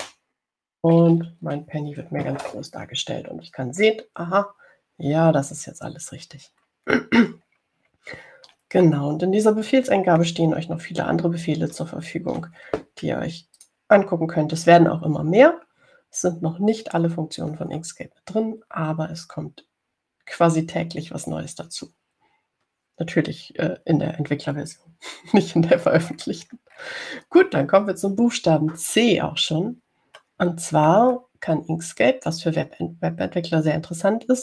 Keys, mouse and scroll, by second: 0.0-0.6 typing, 1.2 Return, 6.8-8.2 ctrl+scroll down 6, 9.3 ctrl+scroll down 2, 10.2 click, 11.1 middle click, 13.3 ctrl+scroll down 2, 14.7 click, 27.2-28.5 scroll down 2, 29.0 scroll down 2, 30.7 scroll down 2, 31.4-32.4 middle drag.